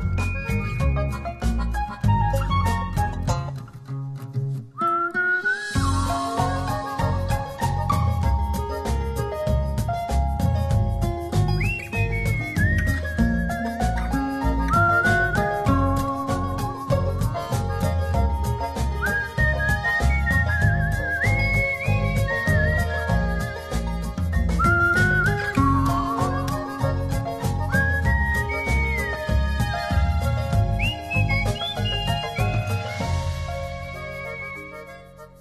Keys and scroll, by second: 2.0 v, 9.7-10.8 typing, 10.9 super+d, 11.0 super+p, 13.0 Return, 13.2-15.7 typing, 13.5 super+d, 13.6 super+-, 15.0 super+-, 15.0 super+space, 15.2 super+z, 15.4 super+-, 15.5 super+h, 16.0 super+z.